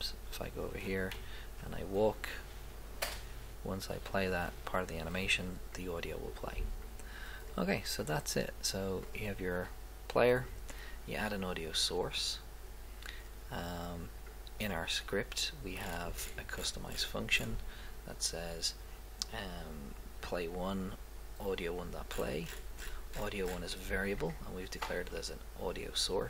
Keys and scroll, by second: 1.1 Left, 3.1 Right.